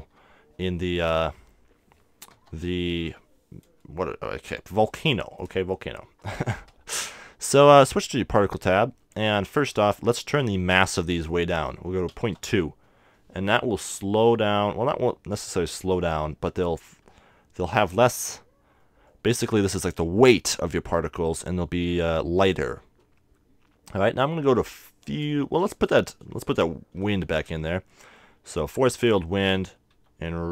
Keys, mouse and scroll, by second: 0.0 KP_1, 2.4 KP_0, 4.6-7.0 middle drag, 8.2-10.0 drag, 9.2-11.2 middle drag, 11.0-12.8 drag, 18.9-21.0 middle drag, 21.8-23.7 middle drag, 25.8-27.5 drag, 27.3 shift+a, 29.9 r.